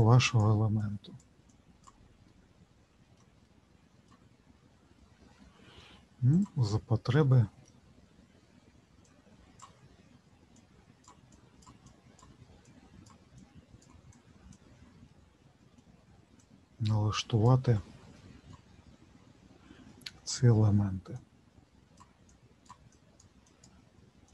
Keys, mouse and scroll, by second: 2.3 middle click, 3.4 middle click, 6.3 click, 7.1 middle click, 9.1 click, 10.6 click, 15.1 middle click, 16.4 click, 17.1 click, 18.2 middle click, 19.9 middle click, 21.1 click, 22.3 click, 22.9-24.3 click.